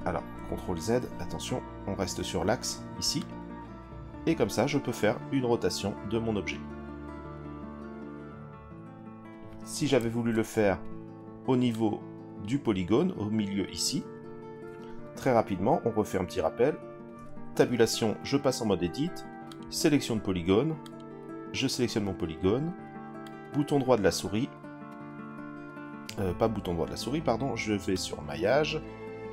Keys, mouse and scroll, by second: 0.6 ctrl+z, 3.2 click, 10.1 ctrl+z, 11.7-12.5 drag, 13.2 l, 17.1 Tab, 19.5 click, 20.8 click, 23.2-25.8 right drag, 27.9-29.3 drag.